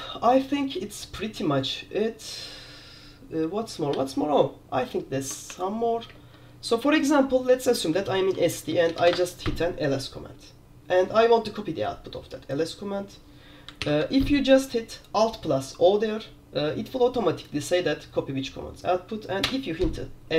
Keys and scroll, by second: 4.0 q, 5.6 super+4, 6.2 super+Return, 8.2 alt+k, 8.3 alt+k, 8.7-9.6 typing, 13.9 alt+o, 19.6 Return.